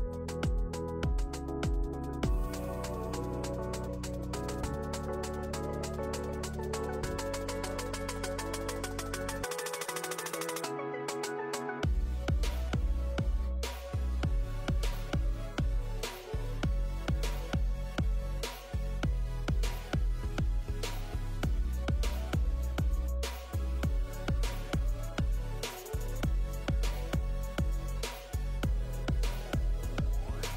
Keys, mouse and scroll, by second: 15.5 Tab, 15.9 scroll up 1, 16.2 ctrl+r, 17.8 click, 18.0 scroll up 2, 18.2 shift+middle click, 18.5 middle click, 18.7 shift+middle click, 19.2 alt+click, 19.7-20.3 scroll down 5, 20.3 ctrl+KP_Add, 20.4 ctrl+KP_Add, 20.6-21.6 ctrl+KP_Add, 21.8 shift+middle click, 22.1 middle click, 22.3 KP_1, 23.0 shift+d, 23.5 p, 23.9 click, 24.0 click, 25.4 Tab, 25.5 click, 25.7 scroll up 4, 25.9 shift+middle click, 26.1 click, 26.4 Tab, 26.6 a, 26.8 s, 27.5 Tab, 27.6 click, 27.7-28.3 scroll down 3, 28.7 alt+z.